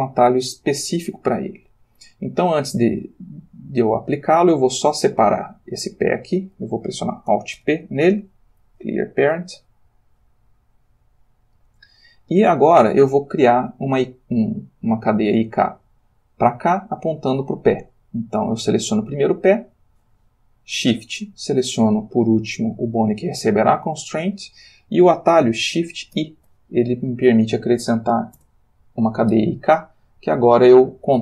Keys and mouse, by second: 3.9 Tab, 4.8 click, 5.5 g, 6.3 Escape, 7.5 alt+p, 8.7 Down, 9.6 Down, 10.7 click, 11.9 Tab, 15.3 click, 19.3 click, 22.1 shift+click, 26.1 shift+i, 28.3 Return.